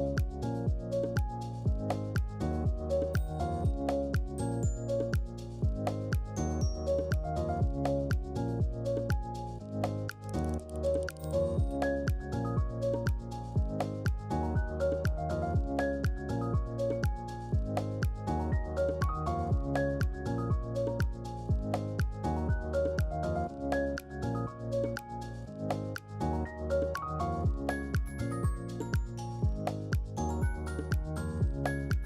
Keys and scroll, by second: 13.4-15.6 typing, 15.8 Return, 19.5 ctrl+q, 20.6 ctrl+q.